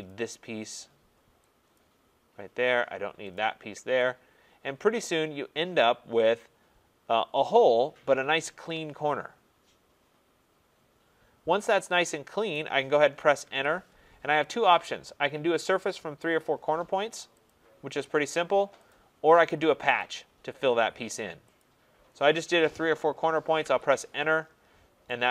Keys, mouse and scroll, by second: 0.1 right click, 1.7 click, 3.3 click, 8.1 right click, 12.5 right click, 13.4 Return, 17.5 click, 18.9 click, 20.1 click, 21.6 click, 23.6 Return, 24.6-25.0 scroll.